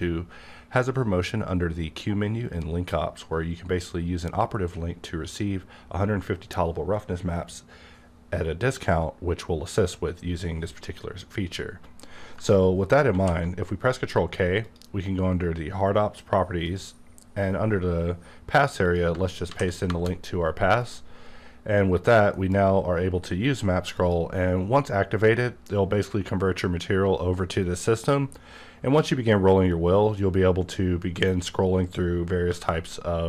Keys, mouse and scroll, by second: 10.1 right click, 13.1 ctrl+k, 14.6 click, 16.6 click, 16.6 click, 18.8 click, 19.4 ctrl+v, 19.8 KP_Enter, 20.7 click, 22.3 alt+m, 23.9 click, 28.1-28.7 scroll up 2, 28.7-29.6 scroll up 1, 29.6-30.3 scroll up 2, 30.3-31.5 scroll up 1, 31.5-32.4 scroll up 3, 32.4 e.